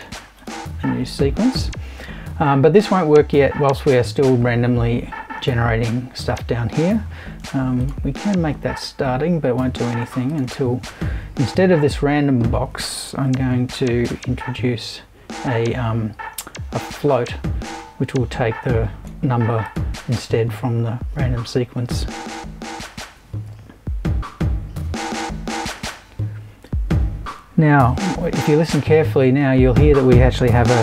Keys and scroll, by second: 13.3 f.